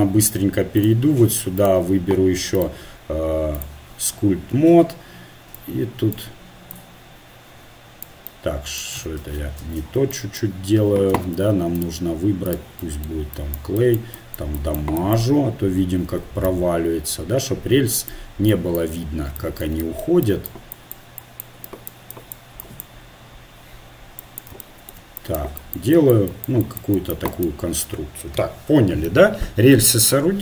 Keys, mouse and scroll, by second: 0.8-4.7 drag, 4.7 middle click, 5.5-8.2 drag, 8.2-9.2 middle drag, 9.2 ctrl+z, 9.7 ctrl+z, 11.1 t, 11.8-18.4 drag, 18.5-25.3 drag, 19.8-21.8 right drag, 25.4-29.0 drag, 29.0-30.4 middle drag.